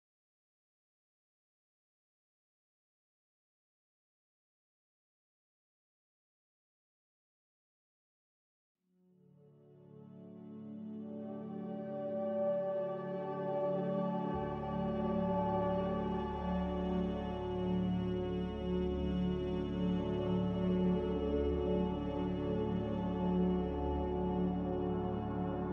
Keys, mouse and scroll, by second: 4.6 m.